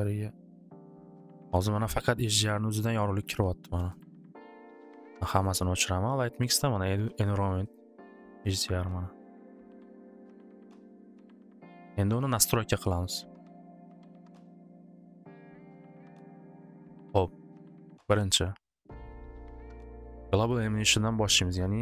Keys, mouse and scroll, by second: 0.0 middle click, 4.0 click, 5.5 click, 6.3 click, 6.9 click, 7.3 click, 7.7 click, 8.1 click, 8.8 click, 9.3 click, 9.8 click, 10.2 click, 10.6 click, 10.9 click, 12.6 click, 14.1 click, 14.7 click, 16.8 click, 17.5 click, 18.8 click, 21.7 click.